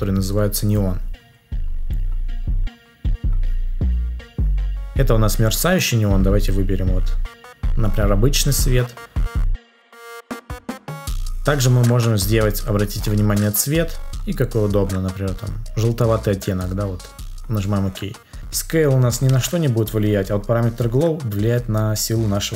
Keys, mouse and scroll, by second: 19.2 ctrl+z.